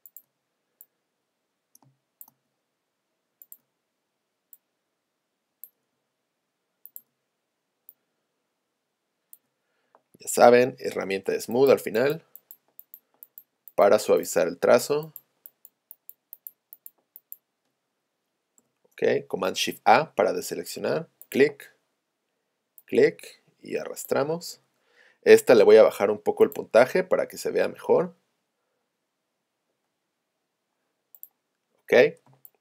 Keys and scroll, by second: 1.9 space, 11.0 s, 18.7 p, 32.3 space.